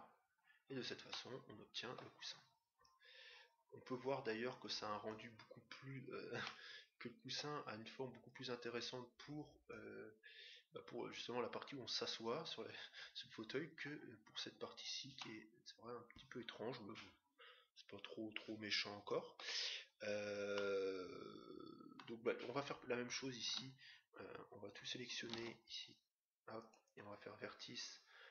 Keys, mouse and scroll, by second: 1.0-2.8 middle drag, 2.9-4.6 drag, 6.2-8.2 middle drag, 8.2-9.8 drag, 10.5-12.2 drag, 12.4 click, 15.2-16.9 middle drag, 20.5-22.3 middle drag, 23.4 Tab, 25.3 ctrl+Tab, 28.2 middle click.